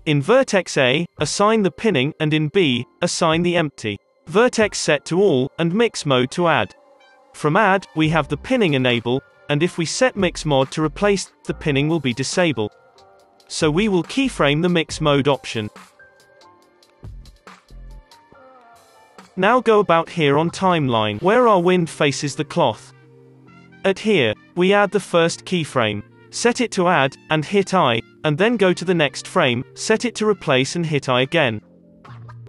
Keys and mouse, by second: 3.5 click, 4.5-6.5 drag, 6.0 right click, 6.0 space, 7.3 middle click, 7.5 click, 9.1 click, 13.1 space, 13.1 click, 15.6 middle click, 16.0 middle click, 16.5 alt+a, 16.8-18.2 drag, 20.9-21.6 Left, 22.6-24.4 middle drag, 23.3 Right, 24.5 middle click, 25.7-32.3 drag, 28.3 Right, 31.4 space, 32.1 space, 32.3 space.